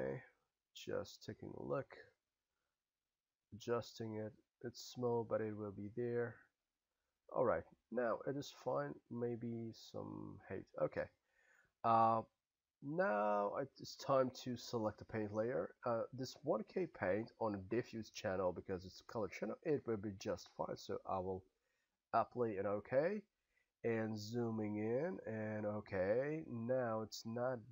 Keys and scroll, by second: 1.8 s, 10.5 s.